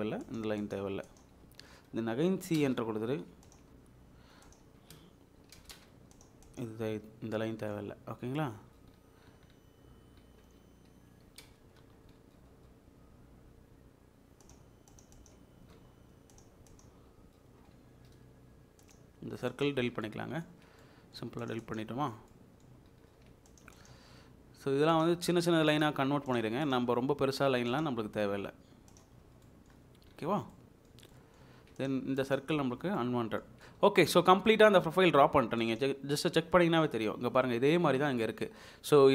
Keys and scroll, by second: 1.4 Escape, 2.5 c, 2.6 space, 4.6 Escape, 5.4-6.1 typing, 6.8 Escape, 11.2-11.8 typing, 17.2 Escape, 19.8 Delete, 22.3 Delete, 25.9 Escape, 29.2 Escape, 32.6 Delete.